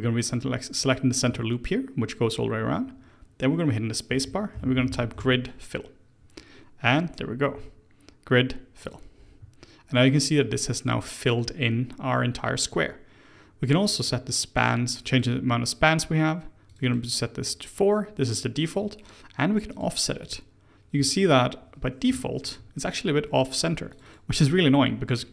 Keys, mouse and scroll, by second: 0.2 alt+click, 0.8 alt+click, 4.1 space, 13.9-21.1 drag, 21.1-23.9 middle drag, 23.9 click, 24.5-25.3 middle drag.